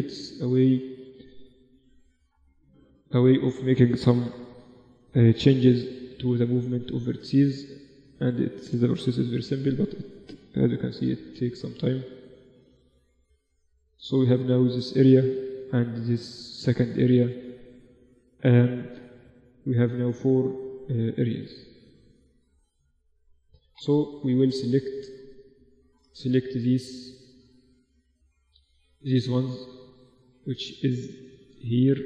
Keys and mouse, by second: 1.8 g, 3.4 a, 3.8 b, 5.2 g, 7.2 Tab, 7.4 Tab, 8.2 a, 8.6 b, 10.2 g, 12.9-23.0 middle drag, 23.0 z, 23.2 Tab, 23.7 Tab, 24.8 z, 26.2 z, 29.8 z, 30.5 z.